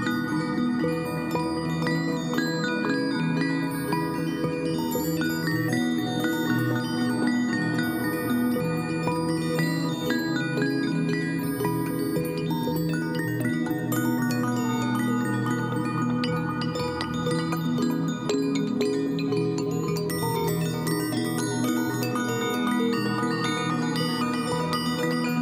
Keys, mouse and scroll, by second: 4.4 ctrl+j, 5.9 right click, 7.8 right click, 8.2 ctrl+y, 9.9 ctrl+t, 18.7-19.6 Up, 19.9 Right, 20.2 Up, 20.7 Right, 21.4 Up, 21.5 Right, 22.1 Right, 22.6 Right, 22.8 Up, 23.4 Up, 23.4 Right, 23.8 Down, 24.1 Right, 24.5 Right, 24.7 Up.